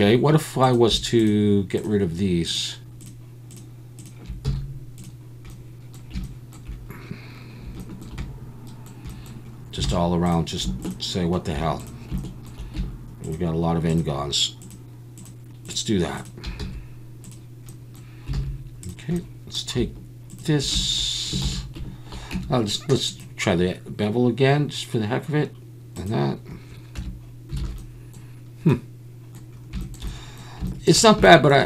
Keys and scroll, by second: 4.4 x, 9.9 alt+a, 16.6 x, 18.3 alt+a, 21.4 ctrl+z, 22.3 Tab, 27.0 Tab, 27.6 alt+a.